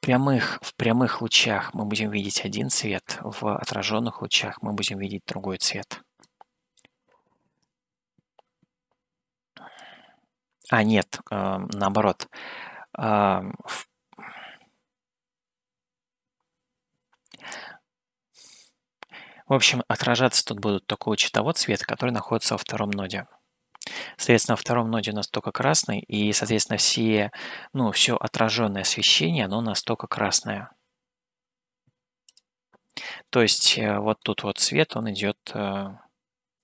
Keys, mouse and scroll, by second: 1.4-3.1 shift+middle drag, 6.3 click, 9.8 click, 26.6 shift+middle click, 32.3 click, 34.3 shift+middle click.